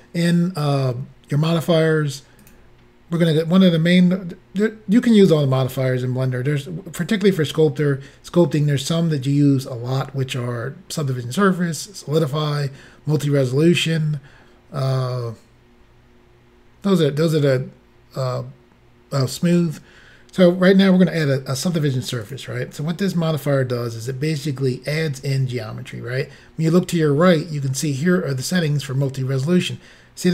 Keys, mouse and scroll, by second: 2.4 click, 22.3 click.